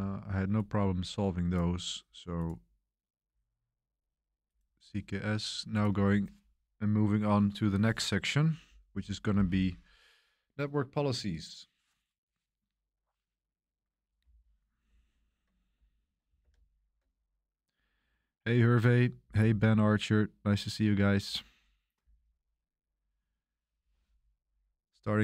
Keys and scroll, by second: 16.4 super+3.